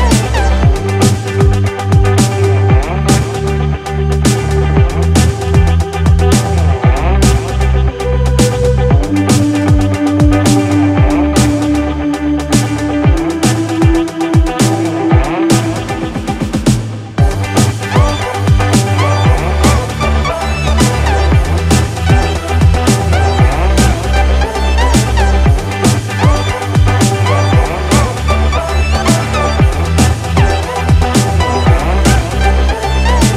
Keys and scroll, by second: 15.9 Up, 17.2 Down.